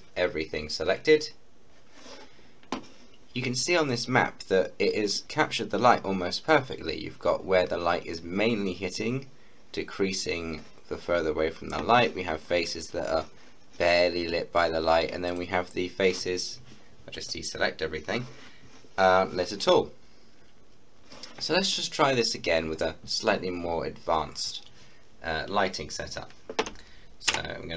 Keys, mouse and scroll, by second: 3.5 scroll up 1, 4.0-4.5 scroll down 1, 6.1-6.4 scroll up 1, 6.4-8.1 scroll down 1, 15.3 click, 25.0 click, 25.0-26.7 scroll down 1, 26.8 scroll down 1, 27.3 Tab.